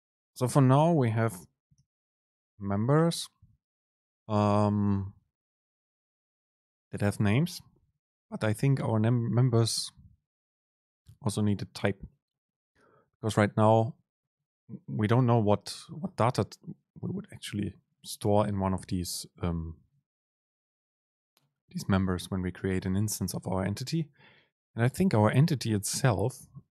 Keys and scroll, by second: 26.6 ctrl+alt+shift+s.